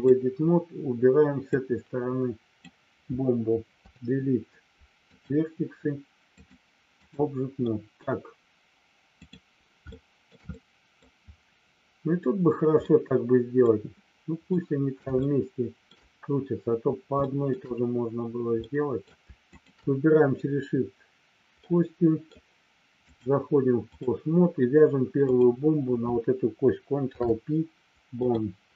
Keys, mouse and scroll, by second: 1.6-2.7 drag, 3.8 Delete, 6.4 click, 7.6 middle click, 9.9 shift+middle click, 10.6 middle click, 12.8 middle click, 14.4 middle click, 15.2 shift+middle click, 17.3 shift+middle click, 18.6 middle click, 19.6 shift+click, 21.7 middle click, 23.0-24.0 drag, 26.9 ctrl+p.